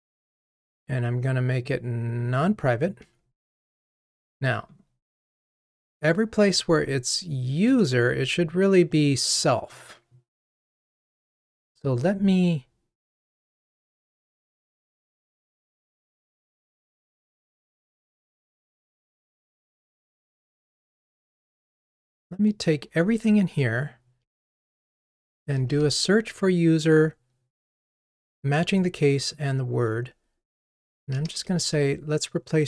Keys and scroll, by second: 3.0 Delete, 24.4 super+r.